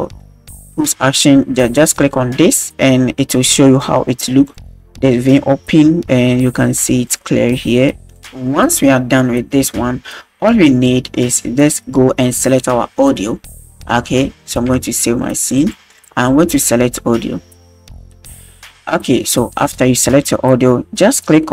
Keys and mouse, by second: 0.2 shift+middle drag, 0.3-0.8 shift+drag, 2.0 click, 4.4 click, 7.0 click, 14.6 ctrl+s, 15.5-16.1 drag.